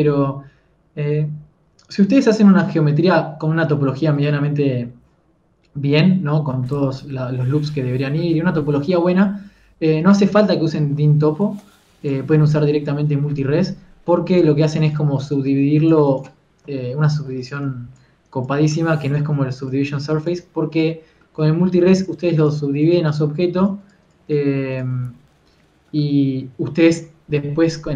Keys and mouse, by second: 0.7 KP_1, 10.7 Tab, 11.5 z, 11.9 z, 12.1 Tab, 13.5 Tab, 13.5 click, 13.5 z, 13.7 f, 15.3 f, 15.5 f, 17.2 KP_3, 17.8 f, 19.6 f, 25.7-26.9 drag, 26.9-27.9 middle drag.